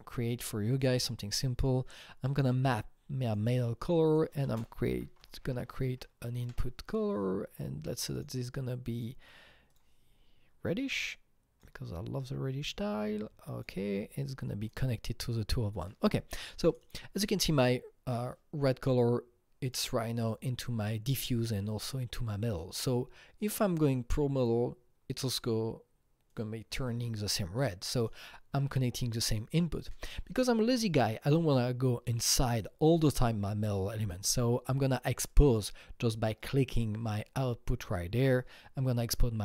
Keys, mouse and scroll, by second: 3.3 click, 4.3 click, 4.4 ctrl+space, 4.7-6.0 typing, 6.1 Up, 6.5 Return, 8.0 click, 8.1 double click, 8.7-10.9 drag, 10.9-15.7 drag, 15.7 click, 16.7 click, 16.8 double click, 17.6-19.6 drag, 19.6 click, 20.2-22.9 drag, 22.9-26.3 drag, 26.3-27.8 drag, 27.8 click, 28.0 double click, 36.4 click, 37.3-38.0 scroll up 3, 38.0-38.4 scroll down 2.